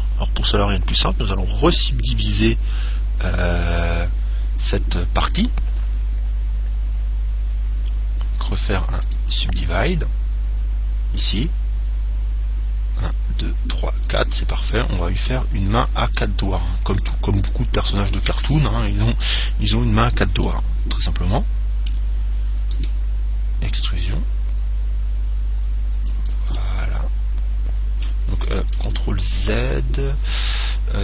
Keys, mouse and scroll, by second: 8.5 w, 14.2 right click, 16.4-19.4 right drag, 20.7-22.6 middle drag, 23.0 e, 26.5 click, 26.8-28.7 middle drag, 29.0 ctrl+z, 29.5 ctrl+z, 30.1 ctrl+z, 30.5 ctrl+z, 30.9 ctrl+z.